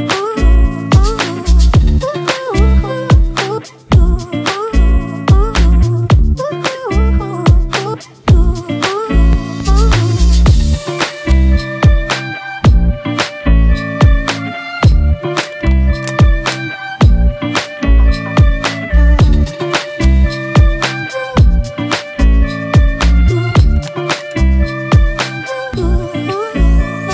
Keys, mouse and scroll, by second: 6.7 ctrl+z, 21.0-23.5 scroll down 1, 24.6 ctrl+t.